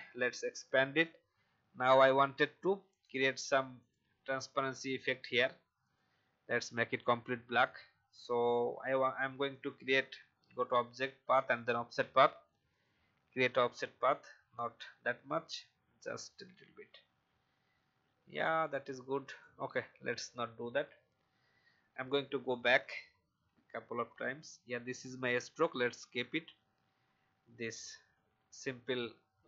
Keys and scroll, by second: 20.7 alt+Delete, 21.9 ctrl+z, 22.2 ctrl+z, 22.3 ctrl+z, 22.5 ctrl+z, 23.3 ctrl+z, 23.5 ctrl+z, 28.5 shift+Up, 28.7 shift+Up.